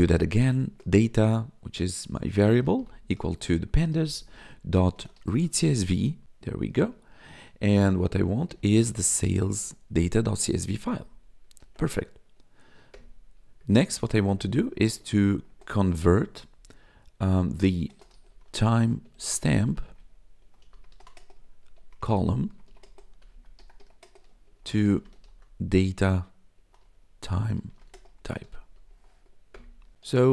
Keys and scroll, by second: 0.0-0.6 typing, 2.4-5.8 typing, 6.1 Up, 6.2 Tab, 6.9 shift+9, 8.2-9.4 typing, 9.6 Tab, 10.6 Right, 11.5 ctrl+s, 12.9 Return, 13.7-15.7 typing, 17.2-30.3 typing, 29.5 Return.